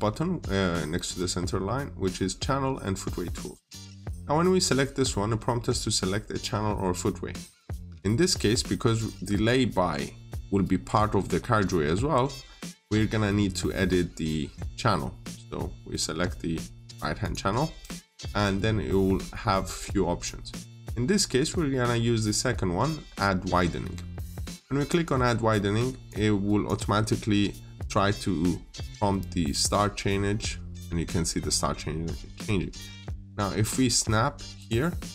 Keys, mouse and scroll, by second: 3.4 click, 8.6-10.9 scroll up 1, 17.1 click.